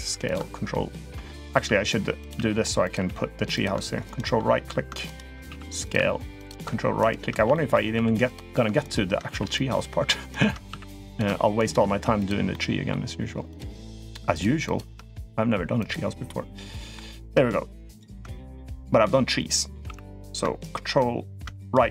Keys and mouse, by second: 1.3 g, 2.2 r, 2.8 g, 5.3 s, 5.8 r, 7.3 shift+middle click, 7.8 s, 9.1 s, 10.5 s, 11.8 s, 12.3-12.7 middle drag, 13.3 click, 13.9 shift+click, 14.1 shift+click, 14.5 shift+click, 15.7 click, 16.1 middle click, 19.7 s.